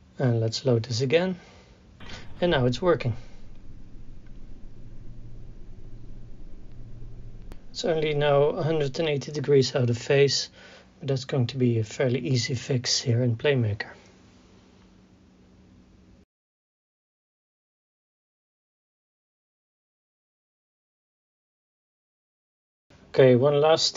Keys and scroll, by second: 2.0 KP_4, 12.7 KP_1, 12.8 KP_8, 12.9 KP_0, 13.0 Return, 15.4 ctrl+a.